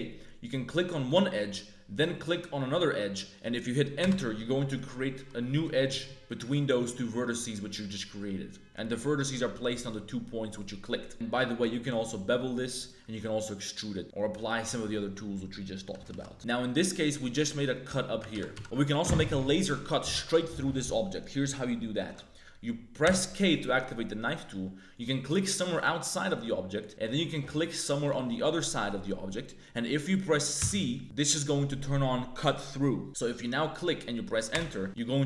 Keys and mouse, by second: 4.4 click, 5.1 1, 5.5 click, 6.2 shift+click, 6.5 click, 8.6 click, 11.8 ctrl+b, 13.1 e, 15.9 a, 16.0 shift+w, 16.3 ctrl+z, 18.3 ctrl+z, 18.5 ctrl+z, 18.6 ctrl+z, 18.6 a, 22.1 z, 23.0 k, 34.8 1, 34.9-35.2 drag.